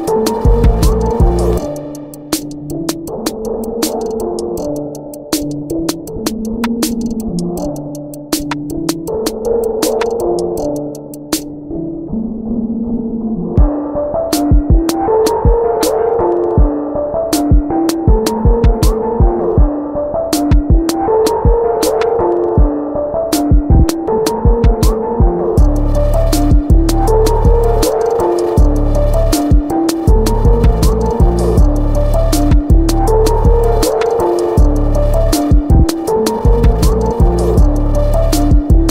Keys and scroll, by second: 1.1 ctrl+alt+shift+e, 3.6 ctrl+BackSpace, 3.7-4.7 typing, 9.4 ctrl+shift+g, 9.6-10.7 typing, 11.0 ctrl+z, 13.8 ctrl+alt+shift+e, 15.0 b, 16.8 ctrl+alt+shift+e, 30.4 b, 36.2 ctrl+alt+shift+e, 38.1 Delete.